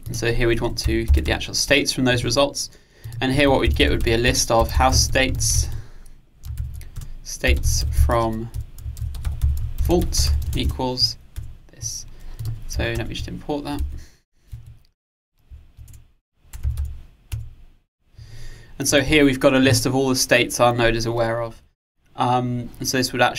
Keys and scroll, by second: 1.7 Return, 13.0 alt+Return, 17.4 Return.